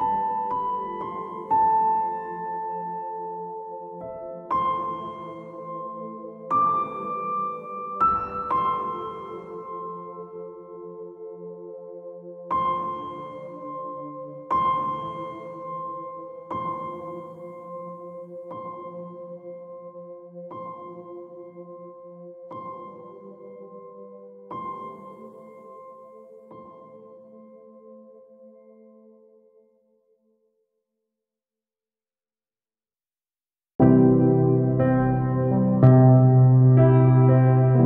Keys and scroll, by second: 8.7 space, 19.5 space, 24.6 ctrl++.